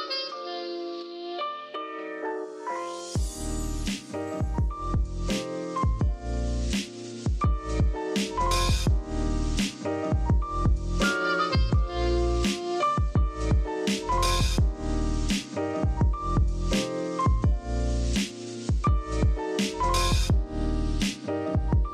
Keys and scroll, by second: 8.7 shift+super+}, 12.7 super+b, 13.7-14.6 typing, 19.3 x, 20.0 super+z, 20.7 z, 21.4 v.